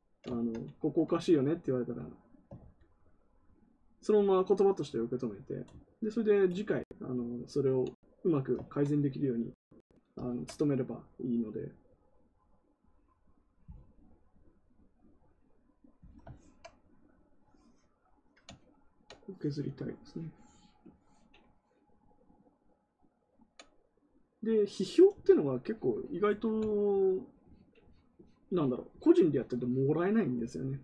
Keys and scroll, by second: 2.5 ctrl+z.